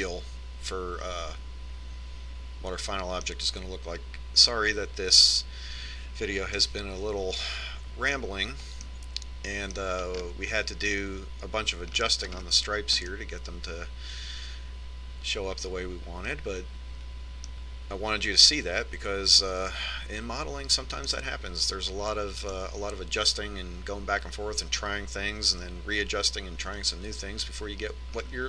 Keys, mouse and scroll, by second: 1.3-3.2 middle drag, 8.2-10.0 middle drag, 10.4-16.5 middle drag, 20.7-24.6 middle drag.